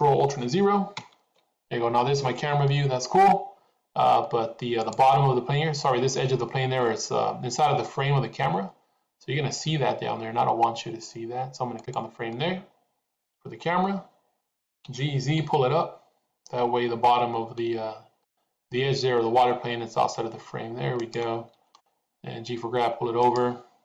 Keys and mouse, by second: 0.9 ctrl+alt+KP_0, 14.7 g, 21.6 g.